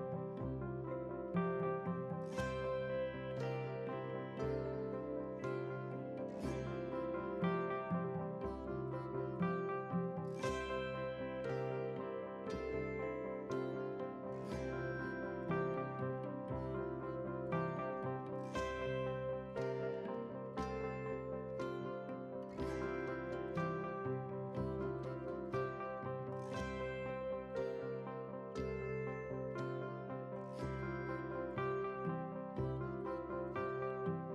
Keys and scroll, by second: 32.7 ctrl+space.